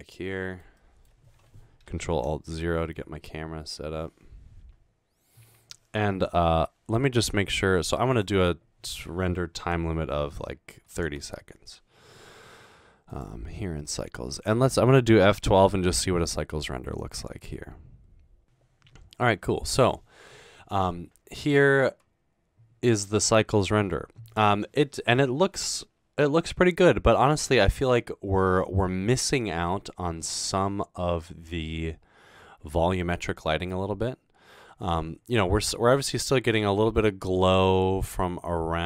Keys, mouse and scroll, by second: 8.1 click, 11.0-11.7 typing, 13.1 click, 16.3 F12.